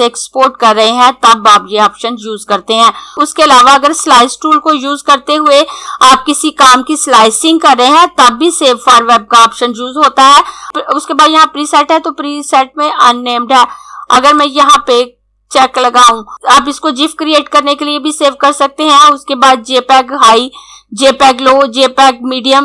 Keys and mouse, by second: 14.1 click.